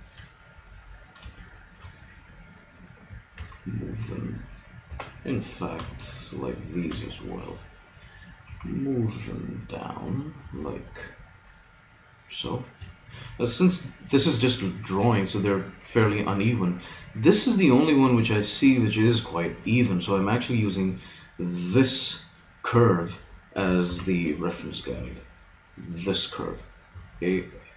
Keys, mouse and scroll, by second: 3.4 g, 5.8 b, 6.8 b, 8.4 g, 22.8-23.8 drag, 23.8 shift+s.